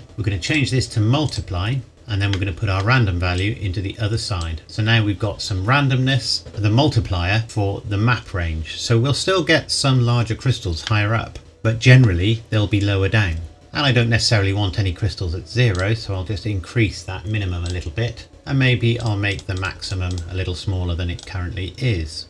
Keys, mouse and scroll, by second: 0.0-0.5 scroll up 1, 0.5 click, 1.9 scroll up 1, 2.3 middle click, 2.8 scroll up 1, 3.4 click, 8.9-10.8 scroll down 1, 10.9 middle click, 13.5-15.3 scroll up 1, 15.7 click, 19.0 click.